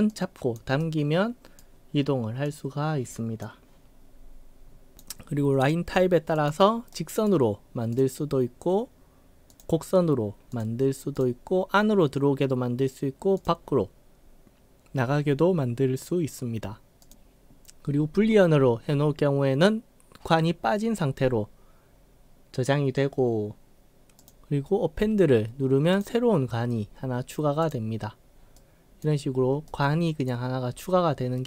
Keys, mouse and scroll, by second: 0.1-0.6 drag, 0.8 right click, 2.5-3.4 drag, 4.4-4.8 scroll up 5, 4.9 click, 6.4 click, 7.0 right click, 8.0 click, 9.6 click, 10.5 click, 11.2 click, 13.4 click, 17.1 click, 24.3 click, 26.0 click, 27.7 click, 28.5-29.0 right drag, 29.7-30.3 right drag.